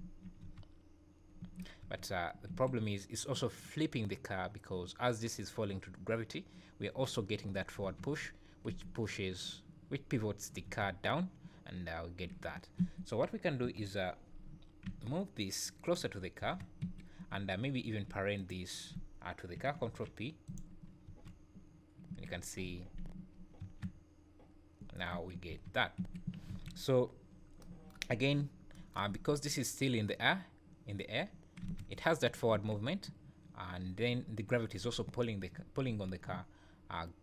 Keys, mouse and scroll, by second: 0.0 `, 0.4 space, 1.5 Escape, 1.8 space, 2.5 Escape, 7.8 space, 8.7 Escape, 10.7 space, 12.8 Escape, 13.7 KP_1, 14.0-14.4 scroll up 4, 14.8 g, 16.2-16.6 scroll down 2, 16.4 space, 16.8 Escape, 17.7 scroll up 1, 18.4 shift+click, 20.9 scroll down 3, 21.1 space, 22.1 Escape, 22.6 z, 23.1 `, 23.6 space, 25.1 Escape, 25.5 space, 26.0 Escape, 26.5 alt+a, 27.3-27.6 scroll up 3, 28.1 `, 28.4 scroll down 3, 29.1 `, 31.6 space, 32.5 Escape.